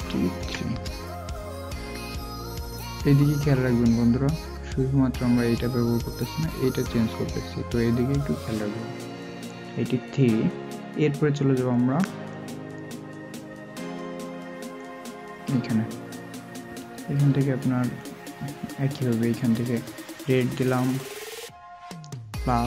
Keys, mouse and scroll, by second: 0.5 typing.